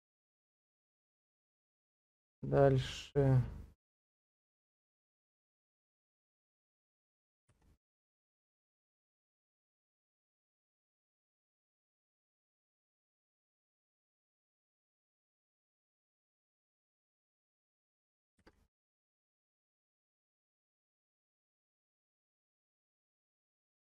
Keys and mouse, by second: 1.9-5.4 drag, 10.9 shift+middle click, 12.0-14.8 drag, 18.4 shift+z, 19.1 shift+middle click, 20.6 Tab, 21.3 shift+middle click, 22.2-23.9 middle drag.